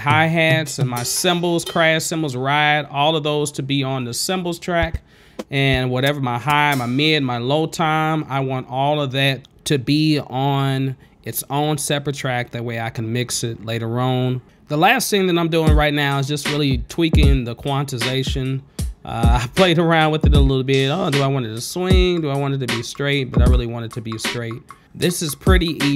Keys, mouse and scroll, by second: 0.3 click, 0.5 click, 1.0 click, 1.4 click, 2.4 click, 2.7 click, 3.6 click, 3.8 click, 3.9 click, 4.6 click, 5.0 click, 5.6 ctrl+space, 6.2 ctrl+z, 7.7 space, 7.8 click, 7.9 click, 8.9 click, 9.3 scroll down 2, 9.5 click, 9.9 click, 10.0 click, 10.9 click, 11.1 click, 11.2 click, 12.1 click, 12.5 right click, 12.7 click, 13.3 click, 13.7 click, 13.9 ctrl+z, 14.1 click, 15.6 click, 16.9 click, 18.0 click, 18.9 space.